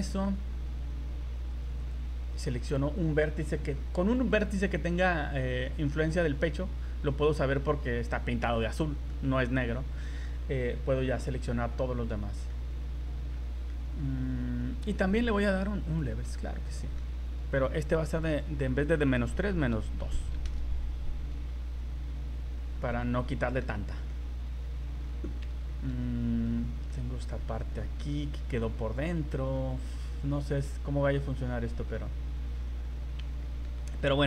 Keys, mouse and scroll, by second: 1.8 right click, 2.5 right click, 5.3 scroll down 3, 5.6 middle click, 6.0 middle click, 6.1 scroll up 2, 9.1 middle click, 11.1 click, 11.7 scroll down 2, 12.1-12.5 scroll up 2, 12.5 middle click, 13.3 scroll down 2, 13.7 middle click, 15.9 click, 16.4 middle click, 18.1 click, 22.4 scroll up 3, 22.8 middle click, 24.1 middle click, 25.3 scroll up 3, 25.7 shift+middle click, 26.0 middle click, 27.0 middle click, 27.8 middle click, 28.7 middle click, 29.7 middle click, 29.8-30.1 scroll down 5, 30.3 middle click, 31.0 z, 31.4 middle click, 33.0 scroll up 2, 33.4 shift+middle click, 33.8 middle click.